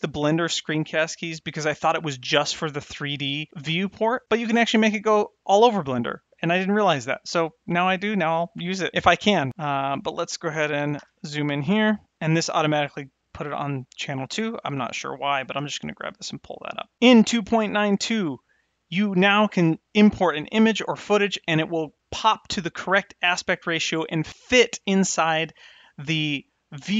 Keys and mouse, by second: 10.9 KP_Decimal, 15.2 click, 15.5 g.